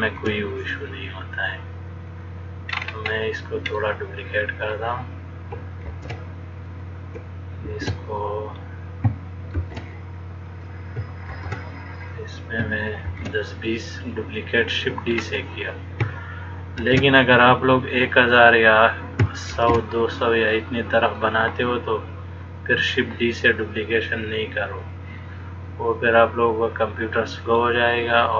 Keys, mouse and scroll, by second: 0.3 shift+d, 3.0-3.9 scroll up 5, 3.9 middle click, 6.0 shift+d, 7.9 shift+d, 11.6 shift+d, 13.3 shift+d, 15.6-16.2 scroll up 2, 17.0 shift+d, 19.8 shift+d, 21.4 middle click, 25.0 click, 26.2 click.